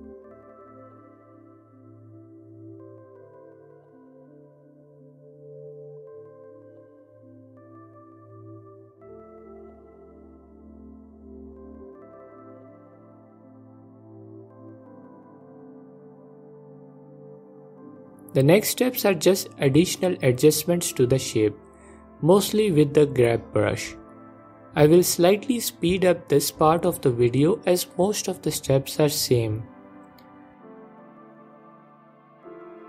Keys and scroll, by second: 11.4 ctrl+Tab, 18.7 ctrl+Tab, 19.5 f, 20.1 Page_Down, 20.1 Page_Down, 20.4 F4, 21.6 f, 22.7 Page_Up, 23.0 F4, 25.0 Page_Down, 25.1 Page_Down, 25.7 f, 27.5 Page_Up, 27.7 Page_Up, 29.1 ctrl+Tab, 32.3 ctrl+Tab, 32.7 Page_Down, 32.7 Page_Down.